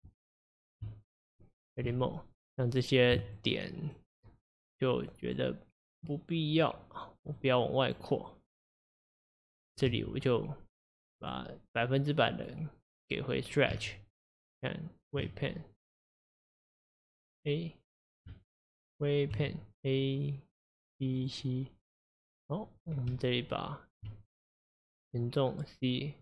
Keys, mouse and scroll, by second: 1.9 Tab, 2.8 click, 5.4 shift+click, 8.0 shift+click, 8.7 shift+click, 11.2 click, 13.1-15.2 drag, 15.2 Tab, 15.6-16.8 middle drag, 16.8 Tab, 17.3 click, 19.3 Tab, 20.8 click, 21.1 click, 24.1 Tab.